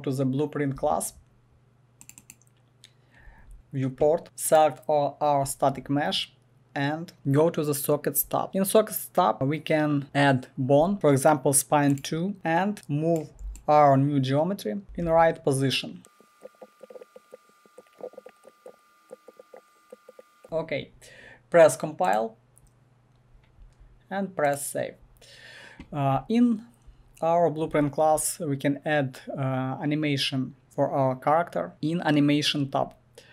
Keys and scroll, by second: 14.8 Return, 15.1 e, 16.5 w, 17.9 1, 18.6 e.